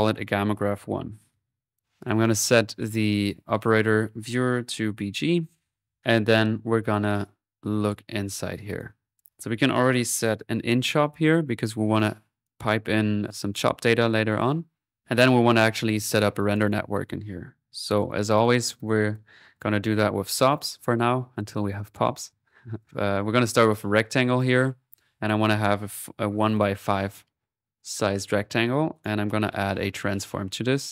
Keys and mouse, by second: 1.6-2.8 drag, 3.2-4.8 drag, 7.7-8.8 middle drag, 8.8-10.5 drag, 10.3-11.0 typing, 11.3-12.5 drag, 13.3 click, 16.2 click, 18.3 click, 18.9-19.6 typing, 19.5 click, 20.6 click, 22.4 click, 24.1 middle click, 25.5-26.6 drag, 25.6-26.3 typing, 28.9 right click, 29.4-30.5 typing, 30.5-30.9 drag.